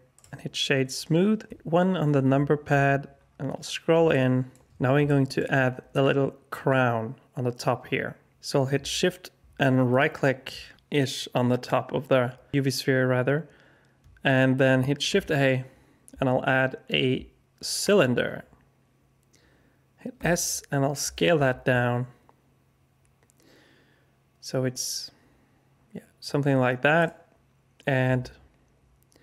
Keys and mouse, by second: 1.5 KP_1, 5.0 alt+shift+click, 9.9 shift+click, 15.0 shift+a, 20.1 s.